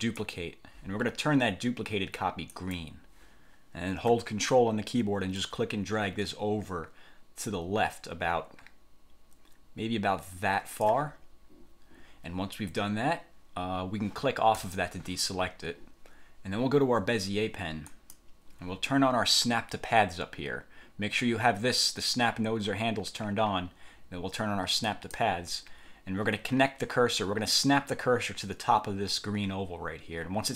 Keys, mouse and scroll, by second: 0.1 click, 2.7 click, 5.5-11.2 ctrl+drag, 14.7 click, 18.0 click, 25.0 click.